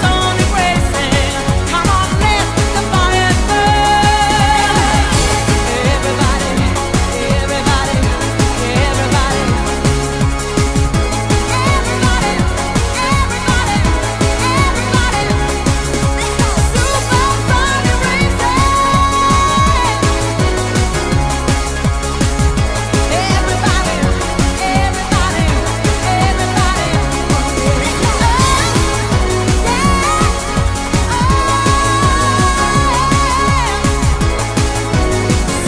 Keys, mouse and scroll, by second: 0.4 right click, 1.0 scroll up 3, 1.8 ctrl+right click, 2.3 shift+right click, 3.0 right click, 4.4 click, 5.9 scroll down 1, 6.3 right click, 10.0 shift+middle click, 10.7 right click, 11.3 ctrl+right click, 11.9 shift+right click, 12.8 right click, 14.2 click, 16.3 right click, 17.4 right click, 18.5 shift+right click, 18.5 middle click, 19.0 shift+middle click, 19.7 KP_7, 20.6 right click, 22.8 click, 24.6-25.1 scroll down 3, 25.1 middle click, 26.3 scroll down 1, 26.6-26.9 scroll up 2, 26.9 middle click, 27.3-27.8 scroll up 3, 28.0 right click, 28.7 ctrl+right click, 29.2 shift+right click, 30.1 right click, 31.0 click, 33.1-33.5 scroll down 5, 33.5 middle click.